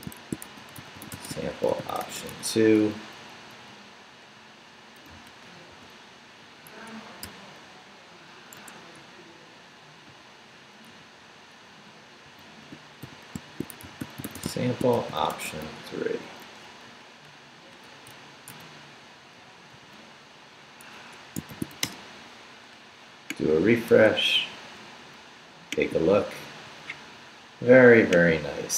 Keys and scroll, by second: 0.0-2.8 typing, 3.3 Left, 5.1 Left, 5.7 d, 6.7 Escape, 7.0 Left, 7.2 s, 8.6 Escape, 8.8 Right, 10.1 Right, 10.9 u, 11.7 Right, 12.0-16.1 typing, 16.9 Left, 18.1 Left, 18.5 BackSpace, 19.4 o, 19.7 p, 20.9 Escape, 21.3-22.2 typing, 23.9 super+r.